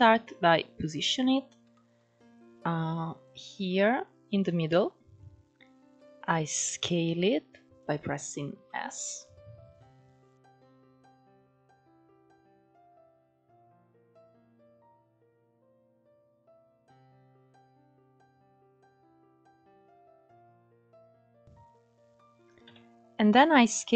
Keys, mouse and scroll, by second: 1.4-2.4 shift+middle drag, 2.4-2.9 scroll up 1, 2.9 click, 5.4 s, 7.9-8.3 scroll down 2, 8.3-8.9 shift+middle drag, 8.9-10.0 scroll up 1, 10.0-11.2 drag, 15.3 click, 17.0 s, 18.7 g, 22.3 s.